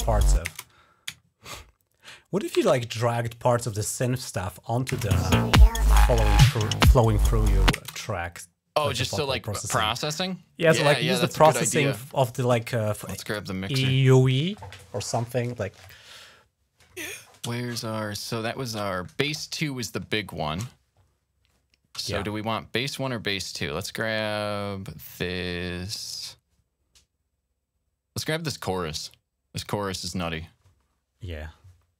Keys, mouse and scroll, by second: 0.4 space, 1.5-2.0 ctrl+scroll up 2, 2.4 typing, 2.9-4.0 drag, 4.5 click, 4.7 typing, 7.7 space, 9.0 click, 9.4 click, 10.5-10.9 scroll up 2, 13.1 click, 17.7 shift+scroll down 2, 20.7 scroll down 3, 28.2-31.9 drag.